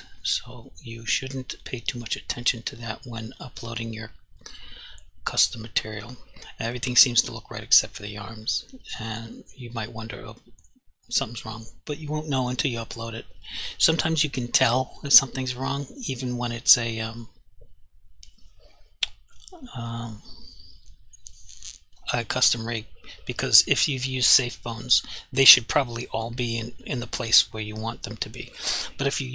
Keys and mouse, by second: 1.7 click, 4.6 click, 8.6 click, 9.8 click, 10.6 click, 23.6 click, 25.7 click, 27.0 click.